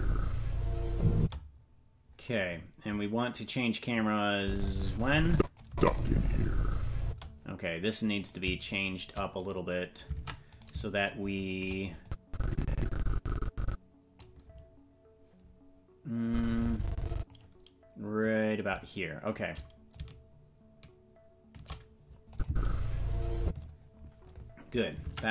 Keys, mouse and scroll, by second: 1.1 space, 4.3-5.5 drag, 5.6 space, 7.0 space, 8.2 right click, 8.8 shift+right click, 9.4 right click, 10.1 ctrl+Tab, 11.0-12.0 shift+right drag, 12.0-14.2 drag, 16.2-17.3 drag, 18.2-19.3 drag, 19.9-21.5 drag, 22.3 click, 22.4 space, 23.4 space, 25.0 ctrl+Tab.